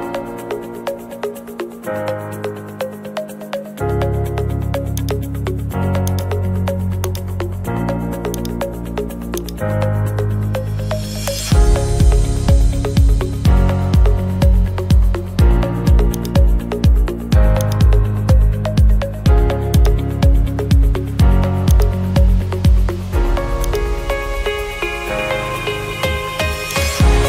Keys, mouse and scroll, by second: 0.2-1.3 middle drag, 5.1 right click, 6.2 click, 7.2 click, 7.3 right click, 8.2 right click, 8.4-10.7 drag, 11.4-12.5 drag, 16.3-17.4 drag, 17.8-18.9 drag, 19.9-21.0 drag, 21.8-23.0 drag, 23.8 click, 24.4 scroll, 26.9 click.